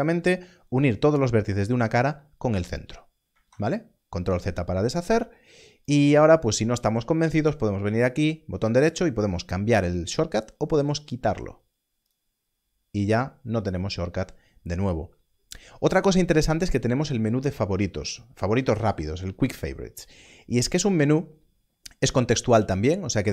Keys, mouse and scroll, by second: 3.4 ctrl+z, 5.8 ctrl+z, 6.7 click, 8.2 right click, 12.0 click.